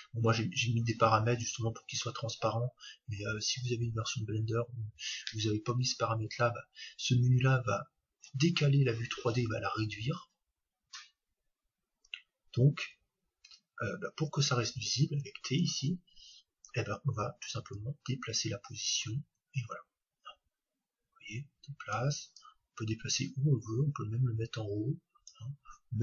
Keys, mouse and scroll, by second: 18.1-19.7 drag, 22.4-24.6 drag.